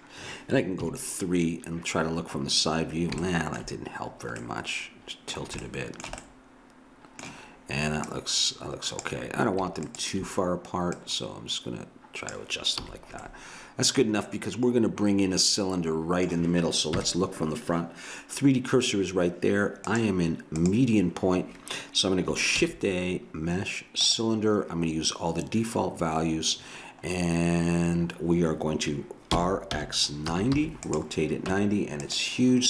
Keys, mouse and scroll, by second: 0.8 KP_3, 3.5 middle click, 4.4-8.1 middle drag, 8.1-12.8 drag, 12.8 a, 12.9 middle click, 16.9 KP_1, 20.5-21.6 drag, 22.5 shift+a, 26.8 middle click, 27.9 middle click, 29.3 r, 31.5 Tab.